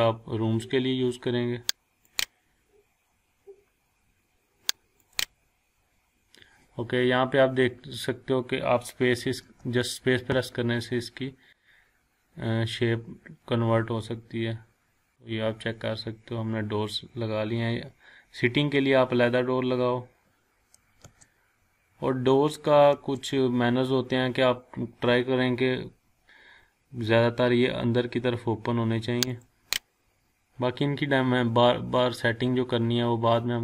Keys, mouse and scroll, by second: 2.1 click, 2.6 scroll down 1, 3.3-4.0 scroll up 1, 5.0 click, 9.4 space, 15.1 click, 15.2 scroll down 1, 16.5-17.7 scroll up 1, 17.7-18.6 scroll down 1, 18.6-19.0 scroll up 1, 21.0 space, 22.9 space, 29.3 click, 29.7 click, 30.1-30.5 scroll down 1, 30.5-32.0 scroll up 1.